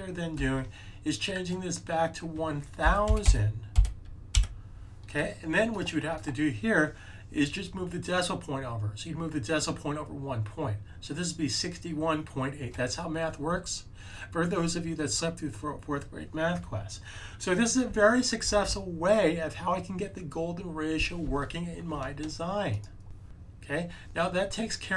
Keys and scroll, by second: 0.3 a, 2.5-3.7 typing.